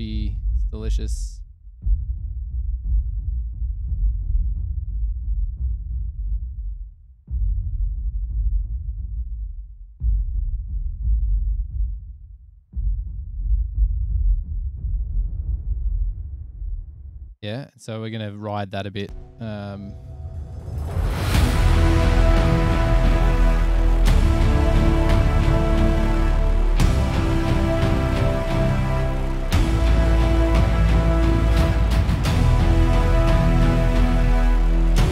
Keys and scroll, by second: 17.5 space, 19.7 super+=.